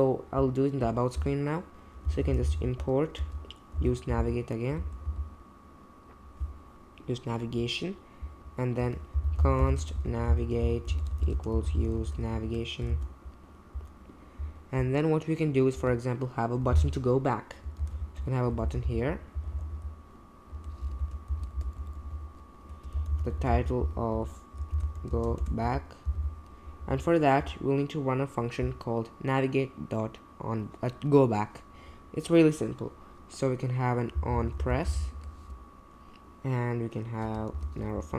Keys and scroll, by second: 1.2 Return, 1.8-5.5 typing, 8.8 Return, 8.9-12.9 typing, 15.7 Return, 17.8-21.5 typing, 21.8 Left, 21.9 Left, 22.1 Left, 22.7-26.6 typing, 33.9-35.4 typing, 37.5 shift+9, 37.9 Right.